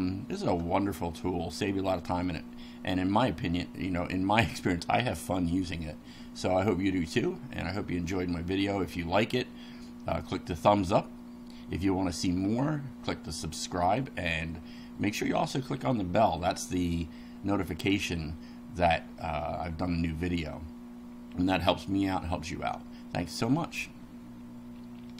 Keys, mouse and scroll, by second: 1.7 middle click.